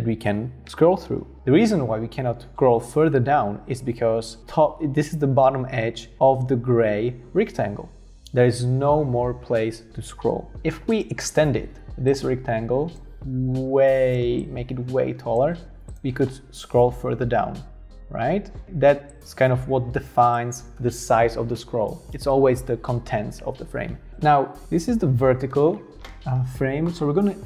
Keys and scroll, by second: 13.1 super+y, 13.1 super+z, 14.2 v.